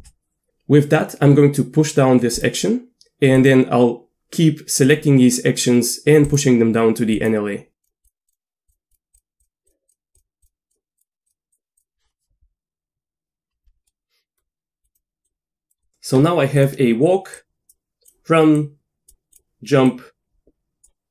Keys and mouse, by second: 3.4-5.0 drag, 6.3 click, 7.2 click, 8.0 click, 8.3 click, 9.1 drag, 9.4 click, 10.1 click, 10.4 click, 11.0 click, 11.3 click, 11.8 click, 13.9-14.4 middle drag, 14.8 click, 15.2 click, 17.4 drag, 18.6-19.1 drag, 19.9-20.9 drag.